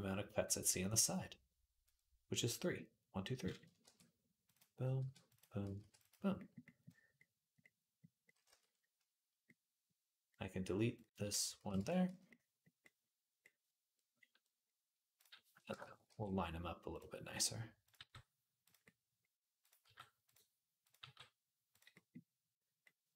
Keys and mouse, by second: 3.6 ctrl+r, 4.8 ctrl+r, 5.6 ctrl+r, 8.1-12.1 drag, 8.2 z, 11.4 x, 11.9 z, 12.1-14.9 middle drag, 14.9 click, 15.0-17.6 middle drag, 15.5 shift+Tab, 15.9 g, 17.6 click, 17.8 g, 19.6 g, 20.8 g, 22.7-23.1 middle drag.